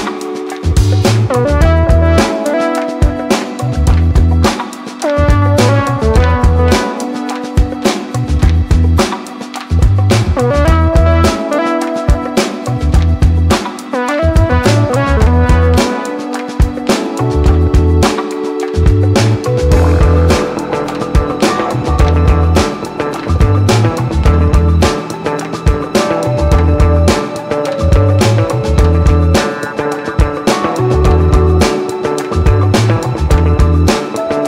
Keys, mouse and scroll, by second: 12.5 click, 18.4-19.2 scroll down 1, 19.2-27.9 drag.